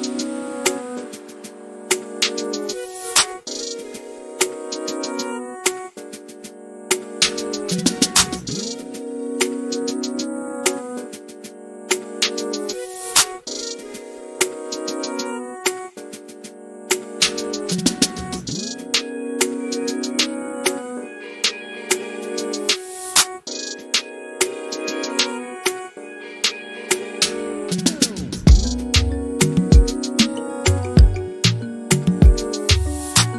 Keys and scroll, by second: 7.5-8.5 typing, 12.9 typing, 16.9-17.8 typing, 21.3 typing.